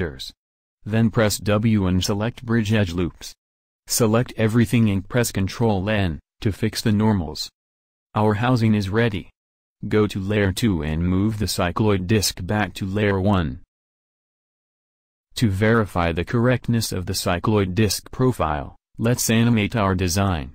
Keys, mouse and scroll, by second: 1.1 w, 1.9 click, 3.9 a, 4.0 a, 4.6 ctrl+n, 8.2 Tab, 12.1 m, 14.2-14.7 drag.